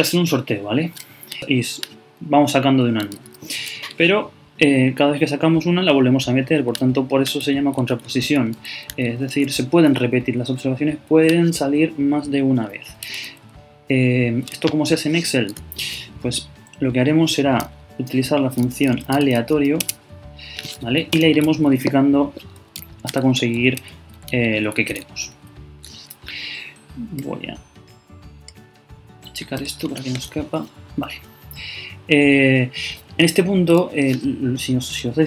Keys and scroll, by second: 1.4 super+Right, 7.4 super+Left, 15.5 shift+0, 23.1 super+Up, 23.2 super+Left, 24.9 super+Right.